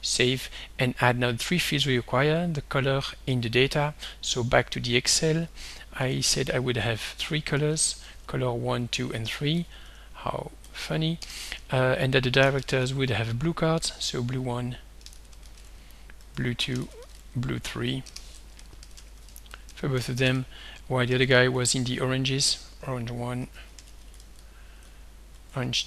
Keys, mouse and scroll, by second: 0.0 ctrl+s, 3.7 alt+Tab, 4.3 alt+Tab, 5.5 click, 5.8-10.6 typing, 9.0 Tab, 11.2 Return, 12.2-13.8 typing, 14.3 Tab, 14.9-17.9 typing, 16.4 Tab, 18.1 Return, 18.6 Up, 19.3 ctrl+shift+Right, 19.5 ctrl+c, 19.7 ctrl+Down, 20.0 ctrl+v, 20.2 ctrl+Down, 21.0-25.8 typing, 25.5 Tab.